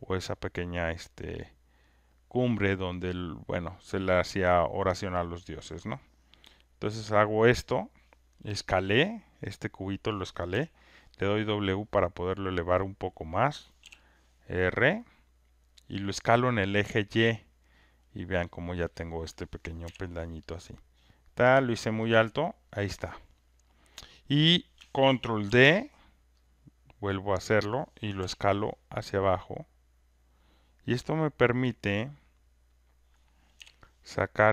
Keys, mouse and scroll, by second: 4.2 click, 6.3 click, 7.8 click, 10.1 click, 10.5 click, 13.4 click, 15.8 click, 15.8 r, 17.7 alt+click, 18.4 alt+right click, 18.8 alt+middle click, 19.8 w, 21.2 click, 22.0 alt+middle click, 23.4 alt+scroll, 23.5 alt+click, 23.8 alt+right click, 24.2 alt+scroll, 25.4 ctrl+d, 27.6 click, 30.3 click, 32.3 click.